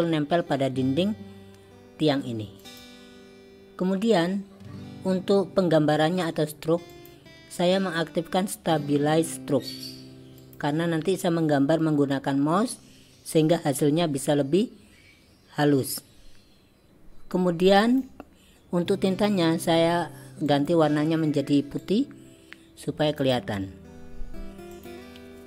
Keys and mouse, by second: 17.9 click, 19.3 click, 20.6 click, 24.8 click.